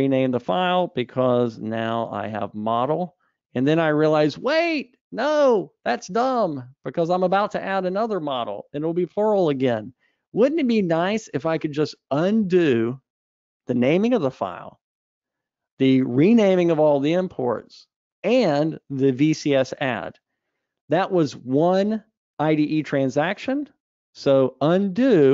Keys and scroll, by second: 3.9 Escape, 25.0 super+z.